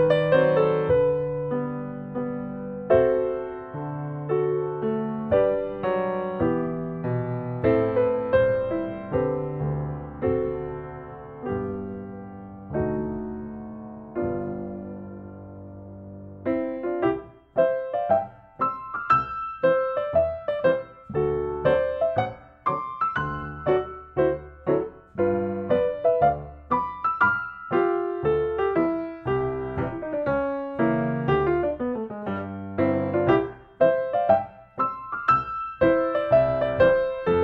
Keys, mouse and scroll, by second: 3.6-5.8 drag, 6.1 Escape, 7.3-8.4 drag, 8.4 space, 9.6 s, 10.7 space, 11.4 click, 12.4 click, 13.9 click, 17.0 middle click, 17.3 scroll, 18.1 middle click, 18.5 middle click, 18.8 middle click, 19.4 n, 20.0 middle click, 20.0 middle click, 20.1 middle click, 20.3 scroll, 23.0 middle click, 24.2 middle click, 24.4 middle click, 24.6 middle click, 24.6 middle click, 26.5 click, 27.8 click, 30.3 click, 31.4 click, 33.2 click, 34.5 Escape, 36.3-37.4 drag.